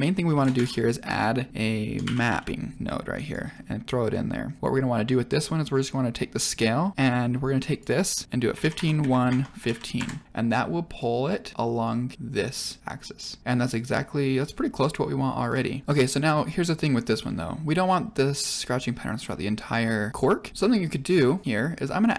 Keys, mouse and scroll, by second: 0.5 shift+a, 2.2 p, 3.5 scroll down 1, 4.1 scroll up 2, 6.9 middle click, 7.6 click, 10.5-10.9 middle drag, 11.8 middle click, 14.7 middle click, 15.5 shift+middle drag, 16.0-16.6 middle drag, 16.9-17.2 scroll down 2, 17.2 middle click, 21.4-21.8 middle drag.